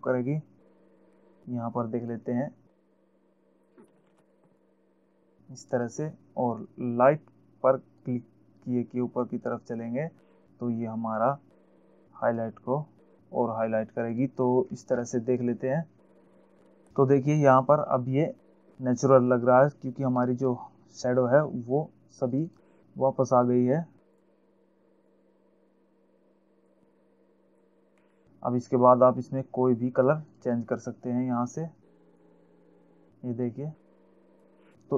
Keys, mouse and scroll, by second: 2.5 click, 4.3 ctrl+alt+z, 4.8 click, 8.4 click, 14.5 click, 21.0-21.6 alt+scroll up 1, 21.6-22.2 scroll up 1, 22.6 click, 24.4 click, 25.3 click, 27.8 click, 28.4-28.8 alt+scroll down 1, 28.8-29.7 alt+scroll up 2, 30.7 click, 32.4 click.